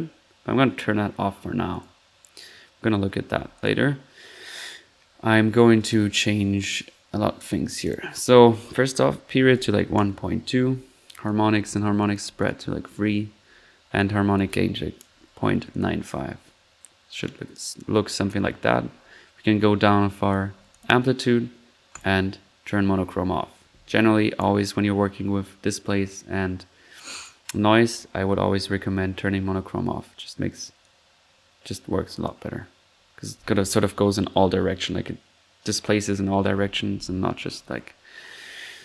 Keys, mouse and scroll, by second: 0.0-0.5 typing, 0.2 ctrl+middle drag, 1.7 click, 7.8 click, 11.0-11.4 drag, 12.0 click, 13.9 click, 14.6 drag, 16.2 middle click, 17.3 middle click, 17.5 middle click, 17.7-18.6 middle drag, 19.8 click, 21.9-22.3 drag, 29.6 middle click, 31.8 click.